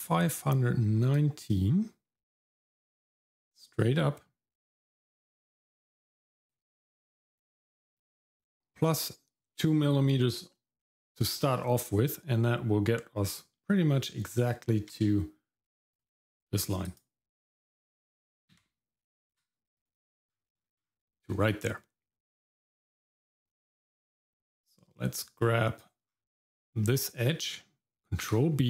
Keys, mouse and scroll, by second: 6.9-7.9 scroll up 3, 7.9-11.4 scroll up 4, 14.5 Tab, 15.9 click, 16.9 click, 18.5 x, 19.3 w, 19.8 click, 20.3-21.3 scroll down 5, 21.3 middle click, 23.0 middle click, 23.4-23.8 scroll up 1, 24.8-25.8 drag, 26.4 scroll up 2, 26.7 middle click, 28.2 ctrl+b.